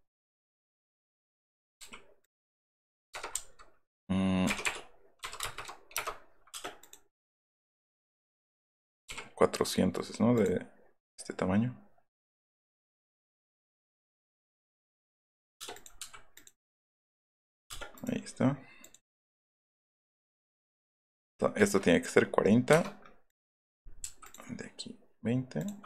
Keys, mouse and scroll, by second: 0.9 click, 2.2 click, 3.3 KP_Decimal, 4.4 BackSpace, 5.4 KP_0, 5.6 KP_0, 5.9 KP_Enter, 6.5 space, 6.8 click, 7.7 click, 10.3 click, 13.5 click, 14.1 click, 14.6 click, 15.5 space, 15.7 click, 16.0 m, 16.3 click, 17.4 click, 17.7 space, 17.9 right click, 19.1 click, 22.7 Return, 23.2 click, 23.7 middle click, 24.2 click, 25.5 click, 25.8 space.